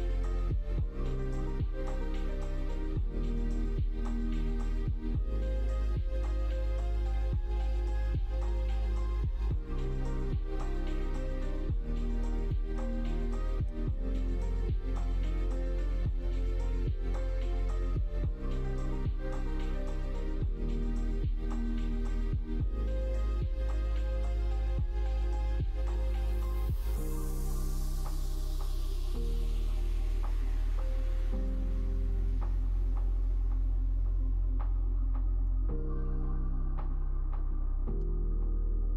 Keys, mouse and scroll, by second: 6.2 middle click, 10.2-14.6 drag, 15.1 middle click, 15.8 middle click, 16.3 middle click, 18.5-19.7 drag, 20.1 middle click, 20.6 middle click, 21.0 click, 21.4 middle click, 21.6 Tab, 22.0 middle click, 22.6 Tab, 22.6 middle click, 24.0 middle click, 24.7 middle click, 25.2-27.3 middle drag, 28.6-33.0 drag, 33.5 middle click, 34.5 middle click, 35.3 middle click, 36.5 Tab, 36.9 middle click, 37.9 2, 38.1 middle click.